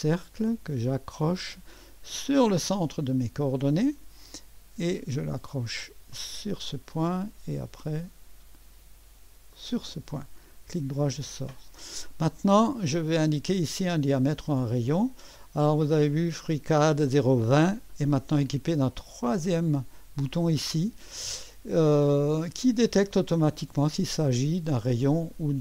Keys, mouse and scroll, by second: 2.3 click, 6.1 click, 9.5 click, 9.8 click, 10.5 middle click, 11.8 middle click, 12.6 click, 15.4 click, 19.3 click, 22.5 click.